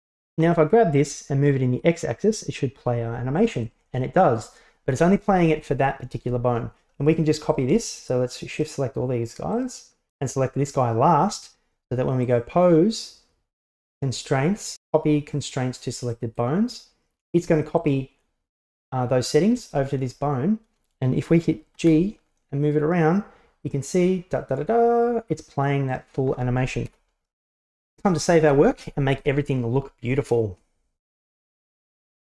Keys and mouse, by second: 1.0-3.6 drag, 5.2 right click, 8.6-9.7 shift+right drag, 12.3-16.5 drag, 17.9 right click, 18.7 right click, 19.6 right click, 21.8 g, 26.9 KP_1, 29.2 g, 30.5-30.8 middle drag, 31.2 middle click, 31.9 middle click.